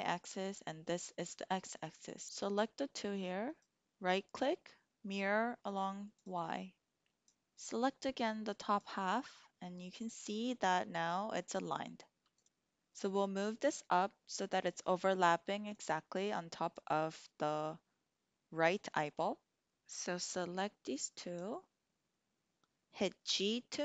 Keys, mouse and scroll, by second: 2.1 click, 5.7 click, 6.2 typing, 7.1 drag, 8.0-8.8 drag, 12.3 click, 15.9-16.6 drag, 19.6 click, 23.2 g.